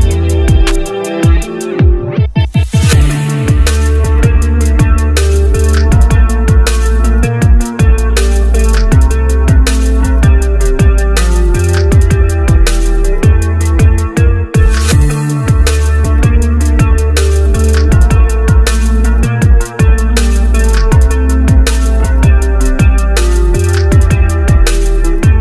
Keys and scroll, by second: 16.9 h.